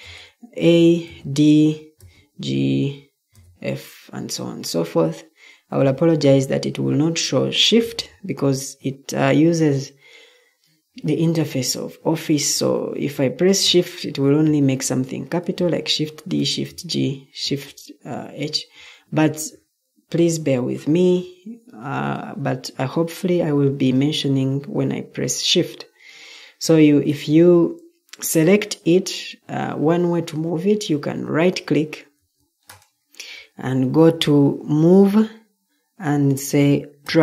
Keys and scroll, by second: 1.0 d, 1.9 g, 3.3 f, 5.6 Escape, 14.1 d, 16.0 g, 17.4 h, 19.1 Escape, 32.1 Escape.